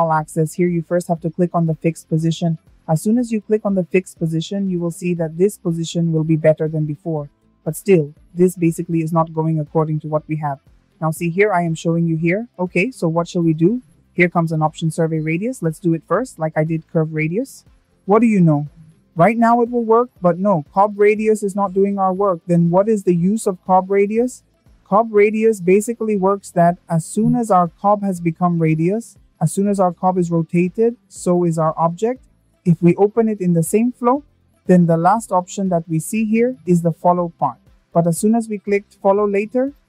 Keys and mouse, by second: 1.2 click, 3.5 click, 9.4 shift+middle click, 15.4 click, 17.5-20.6 drag, 34.4 click.